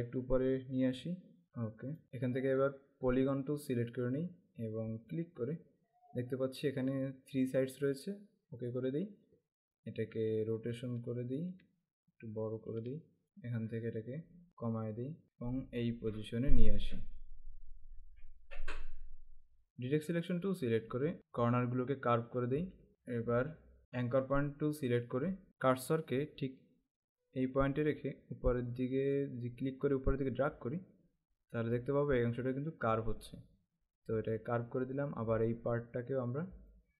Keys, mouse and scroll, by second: 1.1 Up, 2.7 right click, 3.6 click, 5.2 click, 8.8 click, 10.5 click, 12.8 alt+shift+click, 13.7 click, 20.4 click, 23.8 right click, 24.2 click, 27.6 click, 36.4 click.